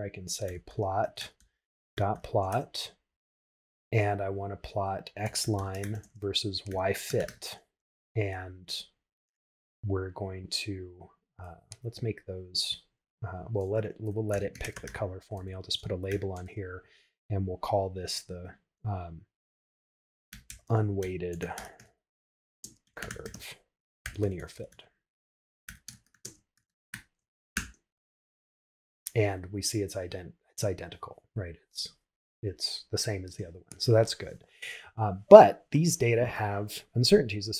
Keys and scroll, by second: 4.1 shift+9, 16.5 shift+', 20.3 shift+u, 22.7 shift+space, 22.8 shift+c, 25.5 shift+l, 26.6 shift+f, 27.5 shift+Return.